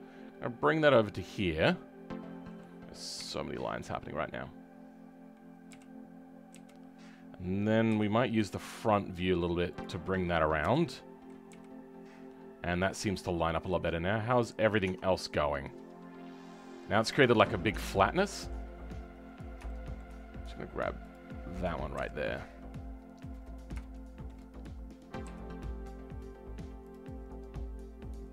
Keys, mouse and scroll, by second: 1.3-3.1 middle drag, 3.1 KP_1, 3.6-5.7 scroll up 5, 5.7 KP_3, 6.5 KP_1, 7.9 g, 12.0-12.8 scroll down 7, 12.8-14.6 middle drag, 14.6 scroll up 2, 14.8 Tab, 15.1-17.7 middle drag, 17.7 Tab, 17.9 scroll down 2, 18.2-19.3 middle drag, 19.3-19.6 scroll up 2, 19.6 right click, 20.1-21.1 scroll up 3, 21.1 click, 21.9 KP_1, 22.5-23.2 scroll down 8, 23.2-23.8 scroll up 6, 23.8-25.3 shift+middle drag, 25.3 g, 27.7-28.1 scroll down 3, 28.1 middle click.